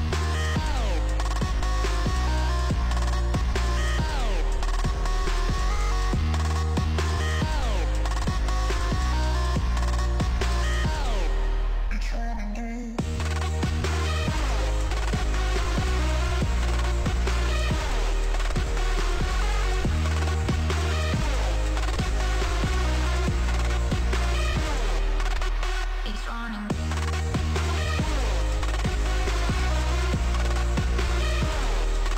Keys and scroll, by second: 32.0 b.